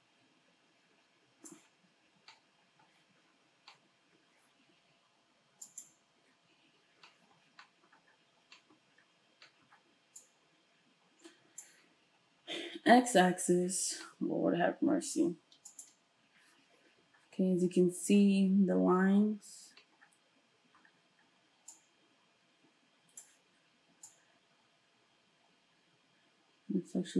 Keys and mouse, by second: 5.8-10.2 shift+middle drag, 10.2-15.8 drag, 15.8-21.7 ctrl+shift+middle drag, 21.7-27.1 drag.